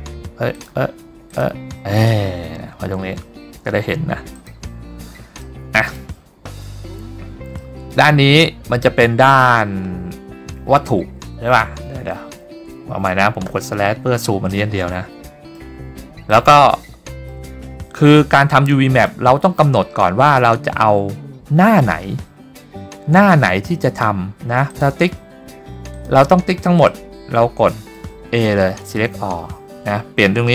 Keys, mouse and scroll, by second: 1.4 click, 4.5 click, 5.5 middle click, 6.3-6.9 scroll up 3, 7.0-7.5 scroll down 4, 7.6 scroll up 1, 7.8 middle click, 12.7 /, 13.6 /, 14.7 middle click, 16.6 shift+middle click, 18.2 middle click, 24.8 click, 26.1 click, 27.0-28.1 middle drag, 28.8 a.